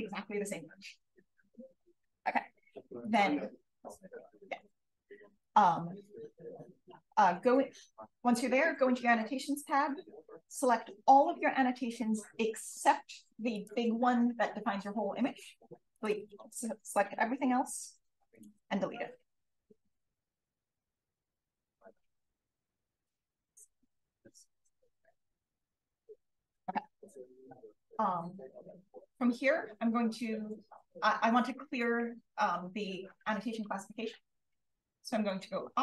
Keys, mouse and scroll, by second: 3.0 click, 9.7-17.8 drag, 18.3 click, 19.9 click, 20.9 click, 26.1 click.